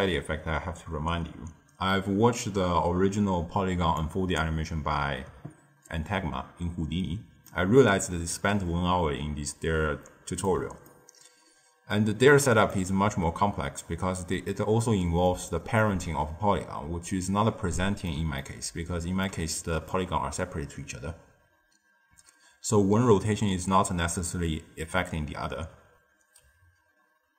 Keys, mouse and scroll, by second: 3.9 click, 7.4-10.4 middle drag, 10.8-13.9 shift+middle drag, 13.9-14.4 scroll up 1, 14.4-16.4 middle drag, 16.4-17.0 scroll up 1, 17.0-22.5 middle drag.